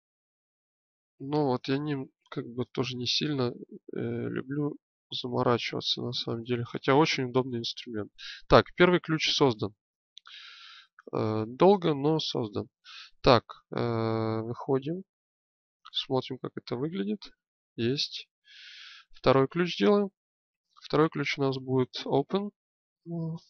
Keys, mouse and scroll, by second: 0.8 click, 14.8 Tab, 20.2-23.4 drag.